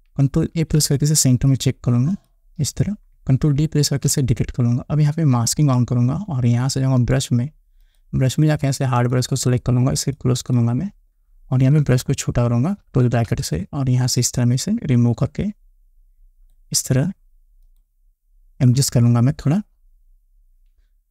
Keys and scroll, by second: 1.0 ctrl+a, 4.3 ctrl+d, 12.2 [, 19.1 Down.